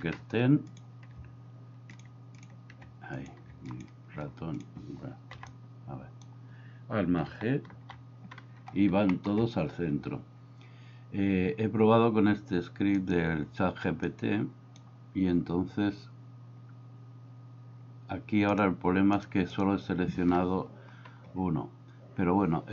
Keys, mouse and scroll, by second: 5.4 b, 5.6 click, 7.8 alt+g, 9.2 shift+middle click, 12.9 click, 14.1 click, 18.5 click, 19.2 click, 19.5 click.